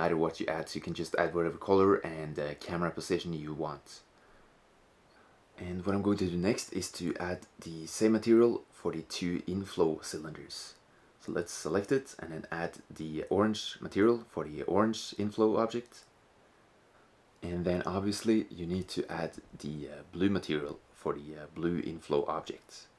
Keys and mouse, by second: 11.0 right click, 11.2-15.3 drag, 19.8-21.1 right drag, 20.8-22.9 drag.